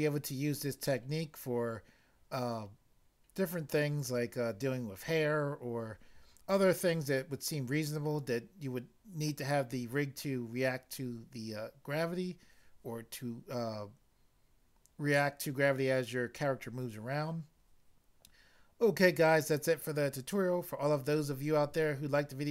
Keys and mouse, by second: 4.0 click.